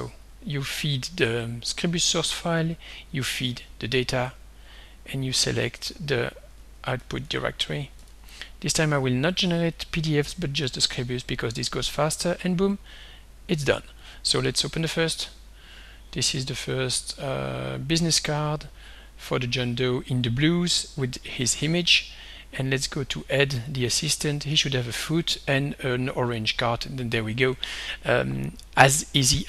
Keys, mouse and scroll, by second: 0.3 click, 2.5 click, 3.4 click, 4.3 click, 6.3 click, 7.3 ctrl+c, 7.9 ctrl+click, 8.1 ctrl+v, 8.9 click, 10.3 click, 11.7 click, 12.8 click, 14.0 click, 14.6 click, 22.7 click, 23.6 click.